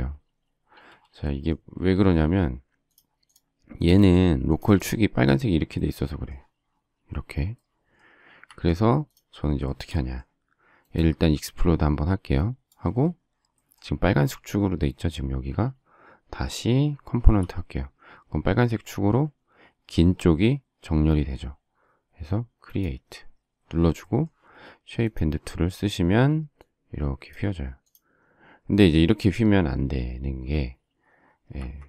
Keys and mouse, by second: 1.7 space, 2.9 click, 3.3 click, 3.9 click, 4.5 click, 8.4 Escape, 17.2 9, 25.0 click, 26.6 click, 27.9 click, 31.5 Escape.